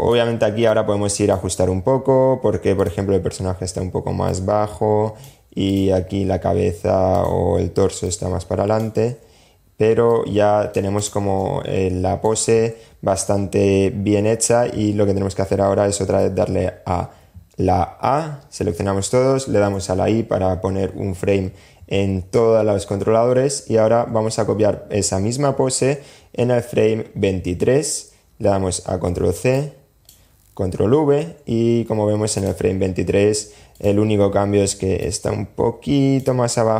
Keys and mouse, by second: 0.0 super+z, 0.0 click, 1.9 click, 3.4 click, 6.2 click, 7.2 click, 8.3 super+z, 9.2 click, 10.5 click, 28.2 super+c, 28.7-30.0 drag, 29.8 super+v, 31.5 click, 32.9 click, 34.2-35.4 drag.